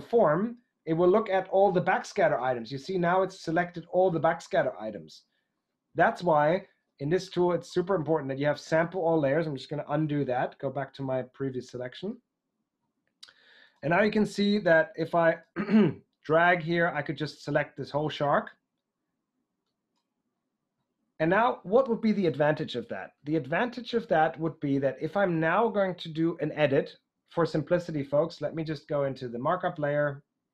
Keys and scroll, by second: 10.0 super+z.